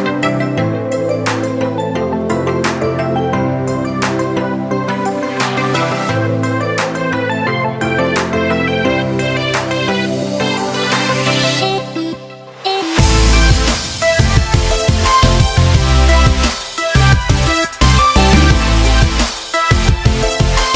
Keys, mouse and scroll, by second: 4.0-4.9 scroll down 1, 4.9 click, 7.0 click, 9.5 click, 9.5-18.4 drag, 9.5 a, 18.4 click.